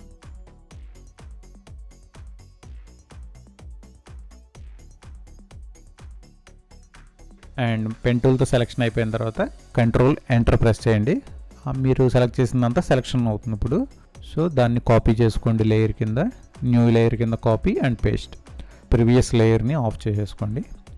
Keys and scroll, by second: 1.0 space, 2.4 ctrl+0, 4.1 ctrl+Return, 8.1 ctrl+c, 10.1 ctrl+v, 19.8 ctrl+0.